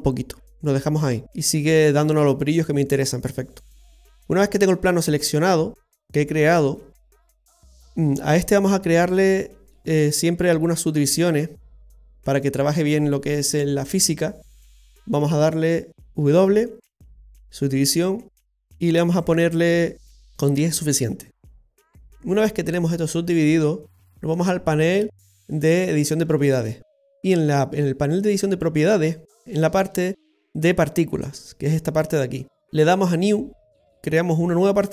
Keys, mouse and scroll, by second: 0.4 middle click, 0.4 scroll down 4, 1.3 click, 3.9 right click, 4.3-4.8 scroll down 1, 4.8 middle click, 4.8-5.4 scroll down 2, 5.4-7.3 scroll down 4, 6.0 middle click, 9.0 w, 11.1 Tab, 11.8 w, 16.4 w, 19.2 click, 20.3 middle click, 20.3-20.9 scroll down 2, 22.4 middle click, 30.5 click, 33.2 click.